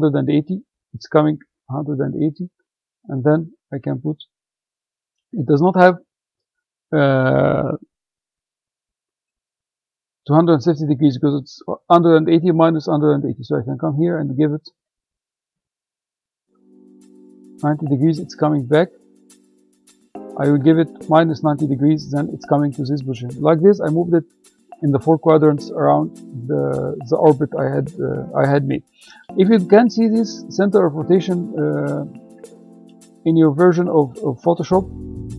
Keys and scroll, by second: 5.9 Return, 16.2-17.2 typing, 18.9 BackSpace, 19.6 Left, 20.6 -.